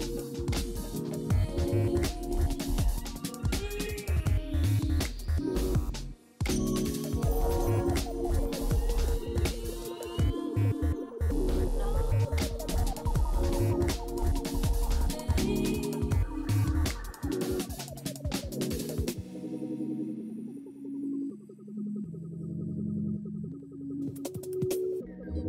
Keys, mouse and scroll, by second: 20.3 double click, 24.0 alt+w, 25.1 alt+middle click.